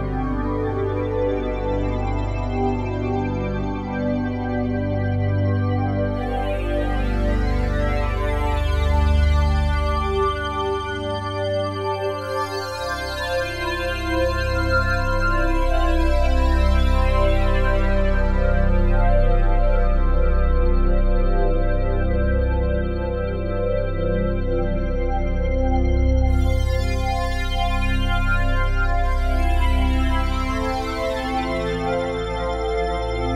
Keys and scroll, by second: 1.1 s.